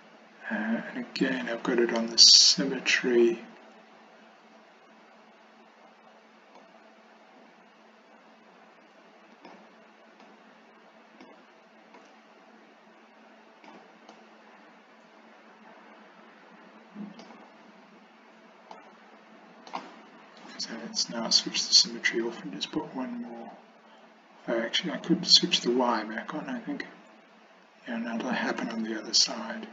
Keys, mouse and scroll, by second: 6.7-9.6 drag, 10.3-11.3 drag, 12.0-13.8 drag, 14.2-17.3 middle drag, 18.9 middle click, 21.6 click, 22.3 click, 25.6 click, 28.7-29.7 drag.